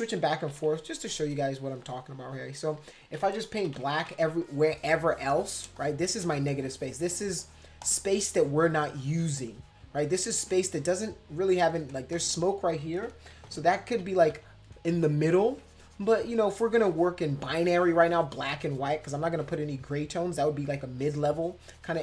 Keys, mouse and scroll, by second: 0.2 ], 0.3 ], 0.5 ], 0.7 ], 1.6 click, 2.5 click, 2.8 click, 3.6-4.2 typing, 4.4 click, 4.7 click, 5.0 click, 5.1 click, 5.4 click, 5.6 space, 5.7 click, 6.3-7.6 drag, 7.8-9.5 drag, 9.6-10.6 drag, 10.8 click, 13.3 ctrl+z, 13.9 ctrl+z, 14.2 ctrl+z, 15.3-18.7 drag, 18.8-21.5 drag, 21.6-22.0 drag.